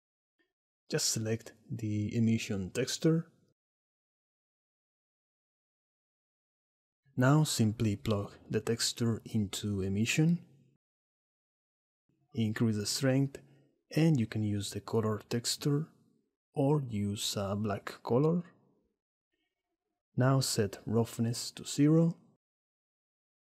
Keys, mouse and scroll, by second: 6.1-9.0 drag, 11.0-12.0 drag, 12.5-14.2 shift+drag, 14.7-15.1 drag, 15.5 click, 19.4 click, 22.0 click, 23.3 click.